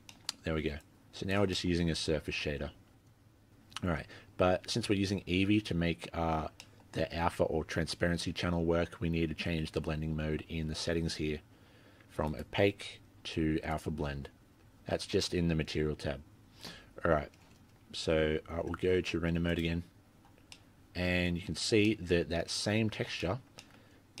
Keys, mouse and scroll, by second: 0.1 middle click, 0.8 click, 1.5 middle click, 1.8-3.1 scroll up 5, 3.1-3.6 scroll down 5, 3.4 scroll up 1, 3.6-4.0 scroll down 1, 4.0-4.6 scroll down 15, 4.6 scroll up 1, 4.8-5.4 scroll down 1, 5.4-6.2 scroll down 1, 6.6 middle click, 12.3 click, 14.3-15.4 scroll up 8, 15.4-16.0 scroll up 13, 17.6-18.4 scroll down 2, 18.0-18.7 scroll up 3, 18.7 z, 20.5 middle click, 21.6 scroll down 2, 21.9 middle click, 22.3-22.8 scroll up 5, 22.8-23.2 scroll down 2, 23.2 middle click, 23.6 shift+middle click, 23.8-24.2 scroll up 2.